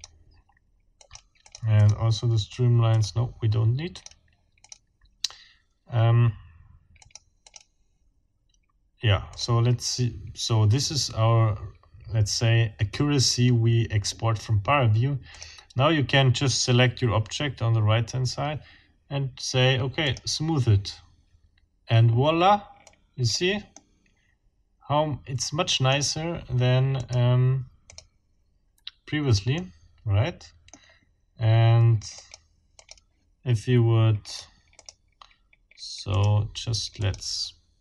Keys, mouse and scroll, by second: 1.0 middle click, 1.4 middle click, 2.9 middle click, 4.0 middle click, 4.6 middle click, 7.0 middle click, 7.4 middle click, 9.3 click, 15.3 click, 20.0 click, 22.8-23.5 drag, 23.8-26.1 middle drag, 27.0 click, 27.8 click, 28.8 scroll down 1, 29.6-30.9 middle drag, 32.2 click, 32.8 click, 34.3 click, 34.8 click, 36.1 click, 37.0 click.